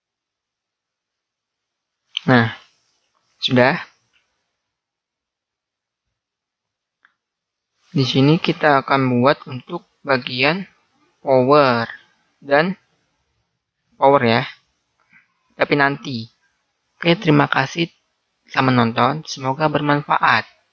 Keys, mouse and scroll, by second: 1.0 middle click, 2.2 a, 5.7-9.0 middle drag, 9.1 middle click, 9.7 middle click, 10.5-11.6 middle drag, 11.6-16.3 right drag, 16.3-20.7 middle drag.